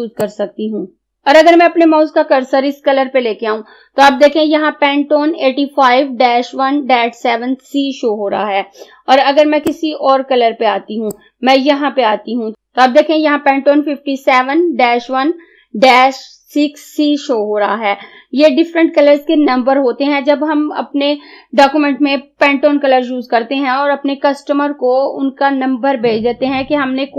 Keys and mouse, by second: 9.7-12.5 drag.